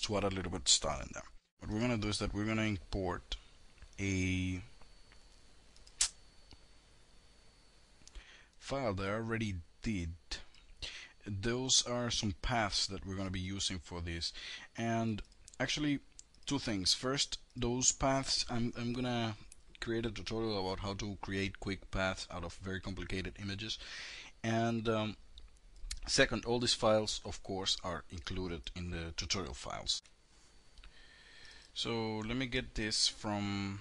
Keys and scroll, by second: 29.4 ctrl+F9.